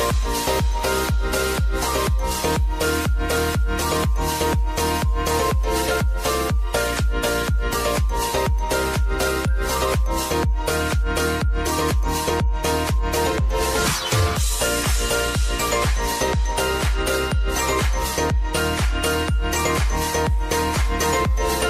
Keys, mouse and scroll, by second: 3.8 ctrl+alt+Home, 5.1 click, 7.9 p, 8.8-11.6 drag, 12.4 =, 13.8-17.9 drag, 17.9 j, 18.5 click, 19.7 F9, 20.6-21.6 drag.